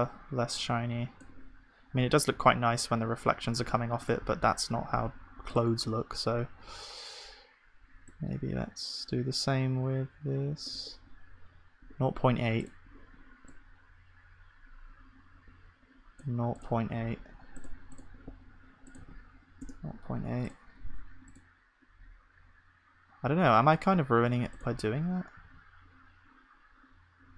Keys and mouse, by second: 2.4 KP_0, 4.8 ctrl+s, 4.8-6.2 drag, 25.5 ctrl+s, 25.5-27.3 drag.